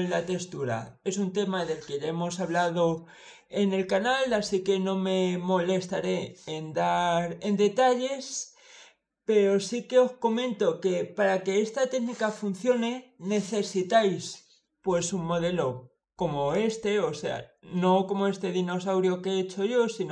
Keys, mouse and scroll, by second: 16.4 click.